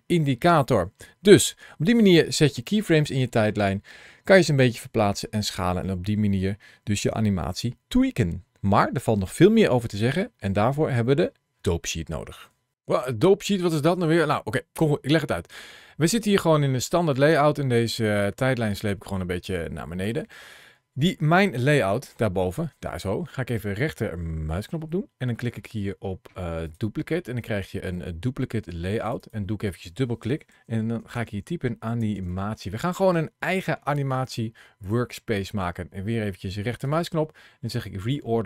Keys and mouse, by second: 16.4-19.9 drag.